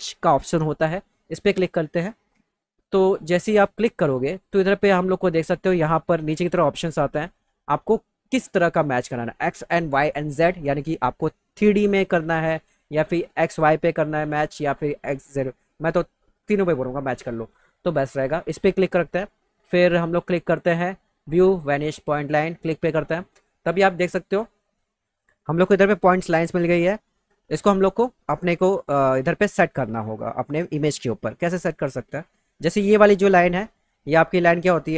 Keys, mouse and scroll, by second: 1.2 click, 22.0 click.